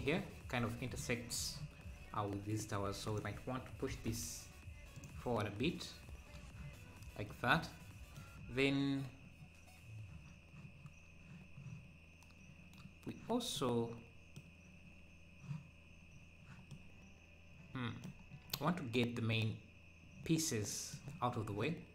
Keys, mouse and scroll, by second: 0.0-0.6 scroll up 1, 4.0 g, 6.8-7.2 scroll down 2, 7.3-8.5 middle drag, 8.5-9.0 scroll up 1, 13.5-16.1 middle drag, 16.1-16.7 scroll down 2, 16.7-18.3 middle drag, 18.3 scroll, 18.5-21.6 middle drag.